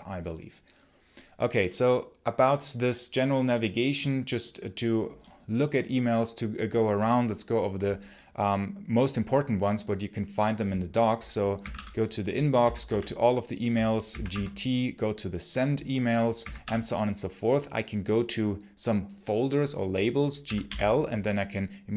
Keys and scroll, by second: 11.2-14.6 typing, 16.2 g, 16.5 i, 20.0-21.0 typing.